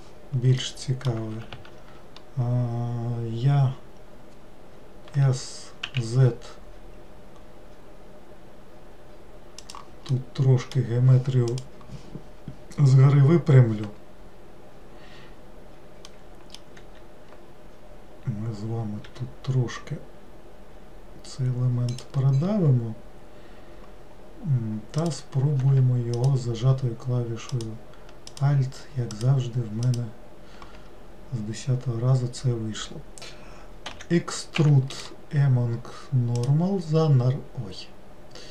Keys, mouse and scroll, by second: 0.8 middle click, 1.7 ctrl+z, 10.3-13.4 middle drag, 16.3-19.2 middle drag, 19.2 e, 25.1 click, 26.3 alt+click, 27.7 alt+click, 28.5 alt+click, 29.3 alt+click, 30.0 alt+click, 36.6-38.2 right drag.